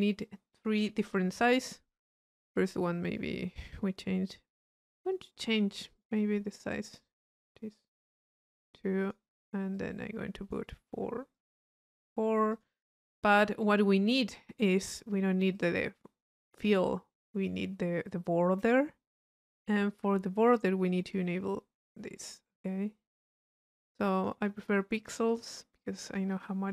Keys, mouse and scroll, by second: 0.2 click, 3.1 click, 5.3-6.5 drag, 7.1 click, 7.8-8.8 drag, 9.0 click, 9.7-10.7 drag, 11.3-12.3 drag, 12.5 click, 15.5-17.0 drag, 21.1-24.6 drag, 25.0 click, 25.8 click.